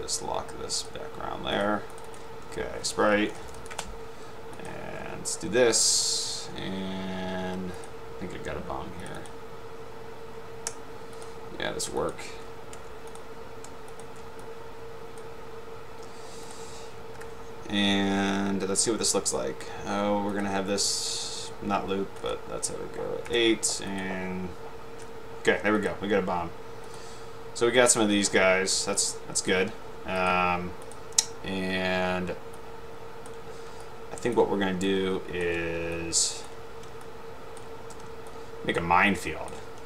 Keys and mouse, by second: 1.0 click, 2.2 click, 3.0-4.2 typing, 4.6 click, 8.0 click, 9.2 click, 11.3 click, 12.0 shift+click, 13.2 click, 14.5-15.5 drag, 17.3 Delete, 20.5-21.0 drag, 22.4 click, 24.1 click, 25.9 click, 29.1 shift+click, 30.3-30.9 drag, 32.6 ctrl+click, 33.9 ctrl+click, 34.9 ctrl+click, 36.5 ctrl+click, 37.1 ctrl+click, 38.4 ctrl+click, 39.3 ctrl+click.